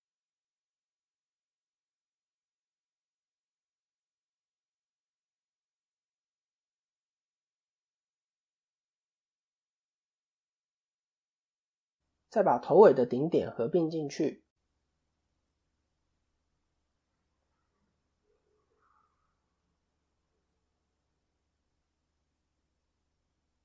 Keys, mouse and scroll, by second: 2.4 click, 2.9 middle click, 4.3-4.6 scroll down 1, 4.6 middle click, 5.0-5.6 scroll up 5, 5.6-6.8 scroll down 5, 7.2 1, 7.4-7.9 scroll up 2, 7.8 shift+middle click, 8.2 middle click, 8.4-8.7 scroll up 4, 9.1 shift+middle click, 9.8 click, 11.1 g, 12.3 click, 14.1 click, 14.5 shift+middle click, 15.0 middle click, 16.0-16.4 scroll down 3, 16.4 shift+middle click, 16.8 middle click, 17.2 scroll up 1, 18.1 shift+middle click, 19.0 click, 20.1 g, 21.9 click, 23.2 g.